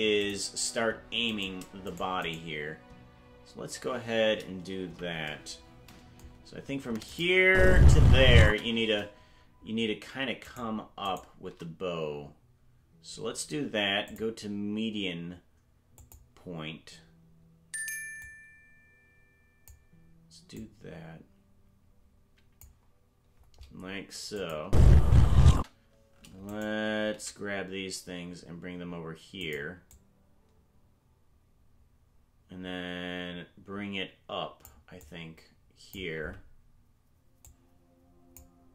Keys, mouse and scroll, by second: 0.2 click, 1.4 right click, 1.9 shift+right click, 4.8 KP_Decimal, 7.1 click, 7.4 space, 8.5 space, 10.5 shift+right click, 11.1 shift+right click, 14.0-16.2 drag, 18.2-19.7 drag, 20.5-22.6 drag, 24.4 click, 24.6 space, 25.5 space, 26.5 right click, 27.1 g, 29.9-34.7 drag, 35.0 click, 37.4-38.4 drag.